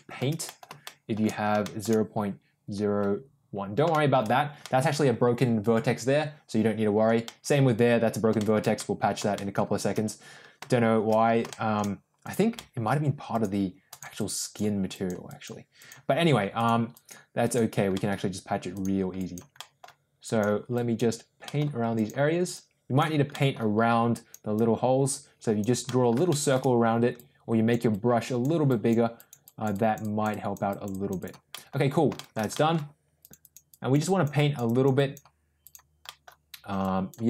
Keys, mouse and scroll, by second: 0.4 middle click, 0.8 shift+middle click, 1.5 shift+middle click, 3.8 shift+middle click, 4.6-7.0 middle drag, 7.2 middle click, 8.3 shift+middle click, 8.7 middle click, 9.3 shift+middle click, 11.4 shift+middle click, 12.1 click, 12.5 middle click, 13.2 click, 13.8 click, 14.1 click, 14.4 click, 14.9 click, 15.2 click, 15.8 click, 16.5 click, 16.9 click, 17.4 click, 17.9 middle click, 18.6 click, 19.1 click, 19.5 middle click, 20.2 click, 20.7 click, 21.4 middle click, 21.9 click, 22.5 click, 23.3 middle click, 24.0 click, 24.5-25.6 drag, 25.8 middle click, 26.2 shift+middle click, 27.1 click, 27.8 click, 28.6 click, 29.1 click, 29.4 click, 30.2 click, 30.6 click, 31.1 click, 31.5 middle click, 32.1 shift+middle click, 32.5 middle click, 33.1 click, 33.4 click, 33.7 click, 34.0 click, 34.3 click, 34.6 click, 34.9 click, 35.5 click, 36.0 middle click, 36.7 click.